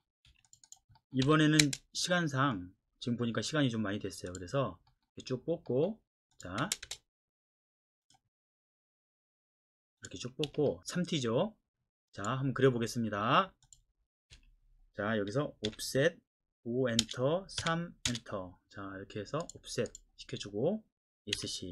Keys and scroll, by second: 0.3 Escape, 1.2 l, 1.6 space, 6.6 space, 6.8 space, 10.4 Escape, 11.1 l, 11.3 space, 14.3 Escape, 15.7 o, 17.0 Return, 17.6-18.1 typing, 21.4 Escape.